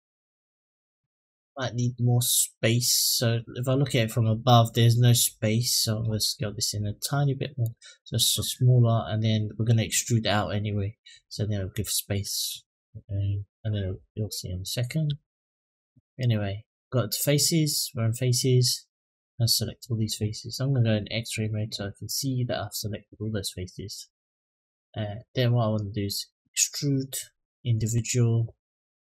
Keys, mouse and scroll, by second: 1.5 middle drag, 3.4 click, 5.8 s, 12.8-13.4 middle drag, 13.8 click, 14.2-14.6 middle drag, 14.8 Tab, 18.3 click, 18.7 click, 20.6 click, 21.1 click, 21.8 click, 22.6-24.0 middle drag, 24.5 middle click, 25.9-27.7 drag.